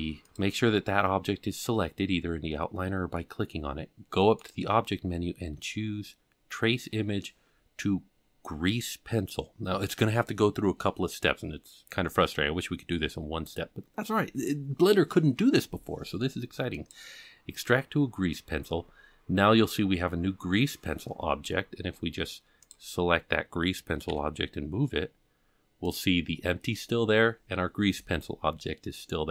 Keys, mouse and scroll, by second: 0.2 click, 4.4-17.0 drag, 22.6 click, 24.0 g.